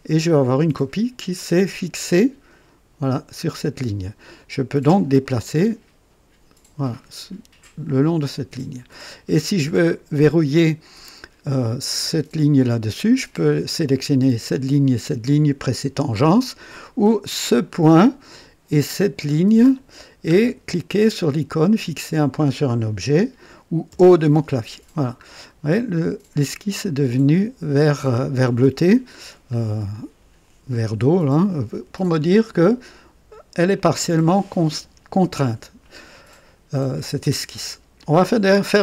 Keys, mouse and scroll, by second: 5.2-8.9 drag, 17.5 click, 19.7 click, 23.8 o, 25.2 scroll up 1, 29.6-30.0 scroll down 1.